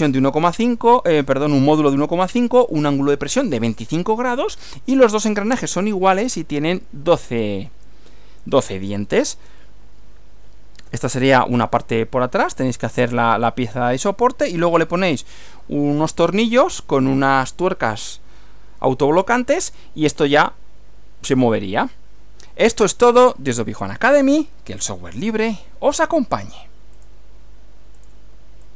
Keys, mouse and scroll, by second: 10.9 Right, 26.9 click, 28.0 click, 28.6 click.